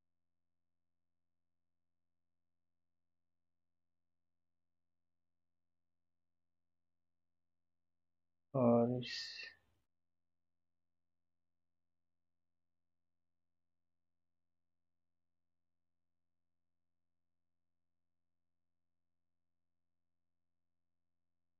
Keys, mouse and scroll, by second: 4.3 g.